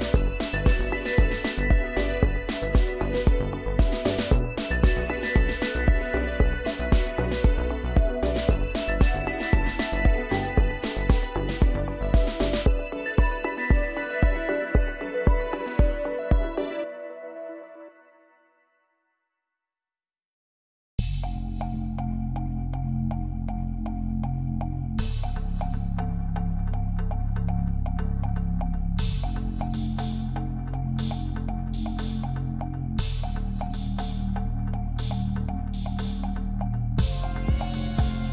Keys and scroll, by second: 3.3 ctrl+c, 6.9 ctrl+=, 31.4 ctrl+=, 32.3 ctrl+space.